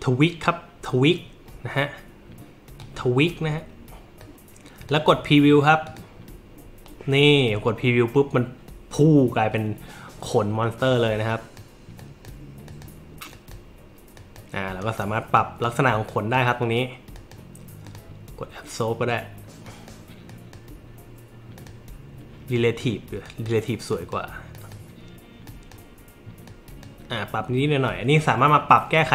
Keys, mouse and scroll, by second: 2.8 click, 4.2-4.9 drag, 5.9 click, 11.3 click, 12.0 click, 12.7 click, 13.3 click, 14.2 click, 14.8 click, 15.4 click, 16.1 click, 17.2 click, 17.9 click, 19.7 click, 20.3 click, 21.6 click, 22.5 click, 23.3 click, 23.9 click, 24.5 click, 25.4 click, 26.5 click.